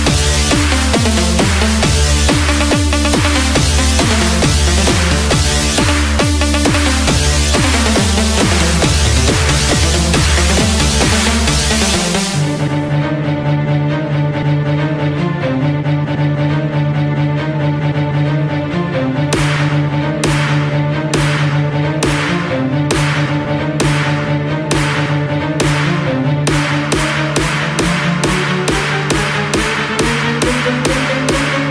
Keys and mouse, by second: 15.4 click, 24.1-28.1 drag.